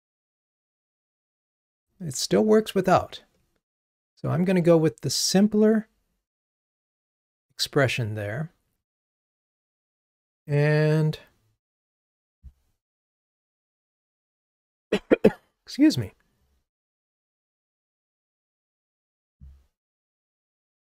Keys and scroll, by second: 13.2 super+`.